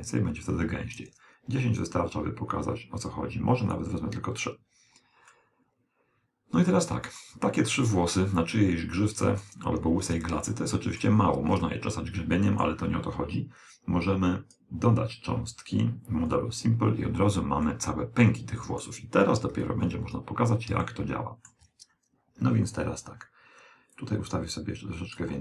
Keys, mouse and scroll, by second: 5.3-7.1 middle drag, 7.2 middle click, 7.7-9.4 middle drag, 10.0-10.5 scroll down 1, 10.5-13.4 middle drag, 14.1 click, 16.3 click, 17.7-19.5 middle drag, 19.6 KP_1, 20.4-20.9 scroll down 1, 20.9-22.7 middle drag, 24.0 click.